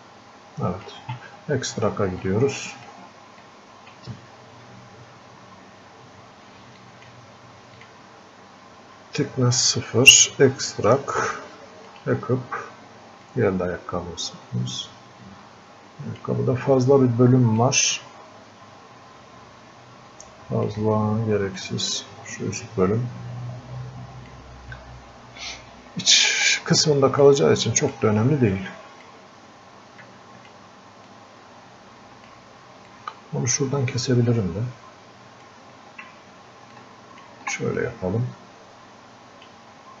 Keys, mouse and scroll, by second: 2.3 click, 3.5-6.3 drag, 6.9 click, 10.2-17.6 drag, 17.6-21.6 drag, 21.6-26.6 drag, 27.3-28.6 drag, 28.6-30.1 drag, 30.1 click, 31.1-36.8 drag, 36.8 ctrl+click, 37.8-40.0 drag.